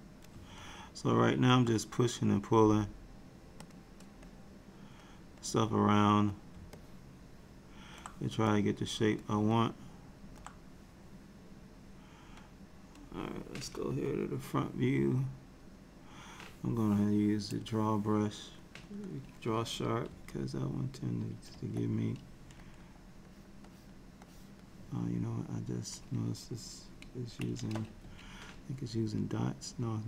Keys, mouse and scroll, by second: 0.7 middle click, 2.7 right click, 4.4 click, 5.6 click, 6.8 middle click, 8.6 click, 9.6 middle click, 13.9 KP_1, 17.7 click, 20.2 [, 21.6 f, 23.4 click, 23.8 click, 24.3 click, 28.1 n.